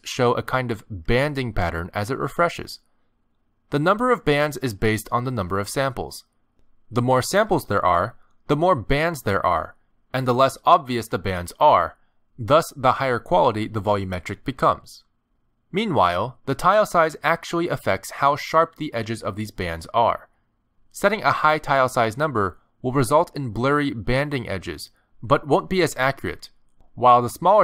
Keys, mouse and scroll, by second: 0.2 click, 3.1 click, 4.2 middle click, 5.1 middle click, 5.2 click, 6.2 click, 8.6 middle click, 11.2 click, 12.1 KP_0, 13.3 middle click, 15.2 middle click, 16.6 click, 20.9 click, 23.4 middle click, 27.5 click.